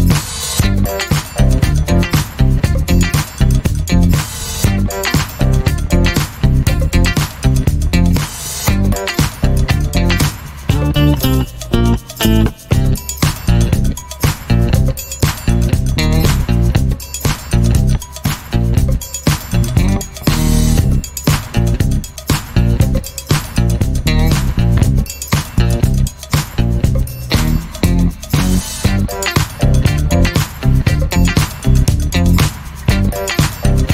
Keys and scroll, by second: 4.9-5.6 typing, 15.9 3, 16.0 Return, 28.5 alt+a.